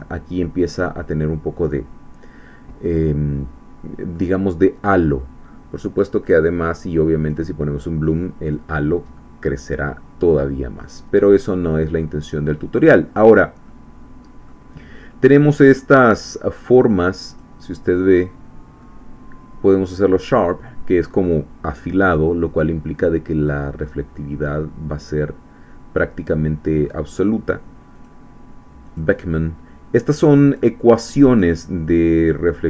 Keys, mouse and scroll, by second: 2.9-4.3 middle drag, 6.1 click, 7.3 click, 8.5 click, 9.2-12.2 middle drag, 12.4-13.6 middle drag, 13.7-14.7 middle drag, 15.3 click, 17.3 click, 18.8-20.1 middle drag, 23.5-27.0 middle drag, 27.9 click, 28.9 click, 30.5 click, 31.5 click, 32.5 click.